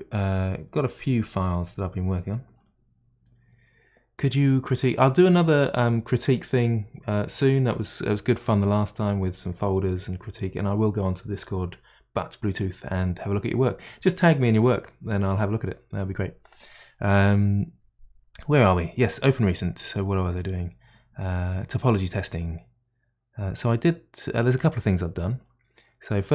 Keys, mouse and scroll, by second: 16.5-19.5 drag.